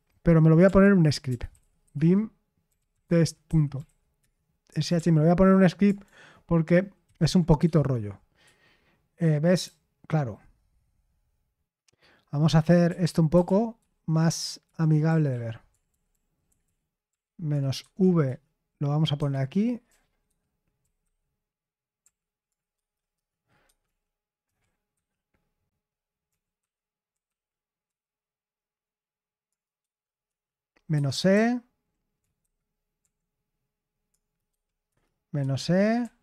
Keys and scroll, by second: 0.4-4.9 typing, 7.0 ctrl+v, 7.6 Escape, 8.1-10.6 typing, 12.6-17.7 typing, 18.2 Return, 19.1 Escape, 19.6-24.9 typing, 23.1 Return, 26.2-27.8 typing, 29.7-32.9 typing, 30.9 Escape, 34.4-36.2 typing, 35.3 Escape.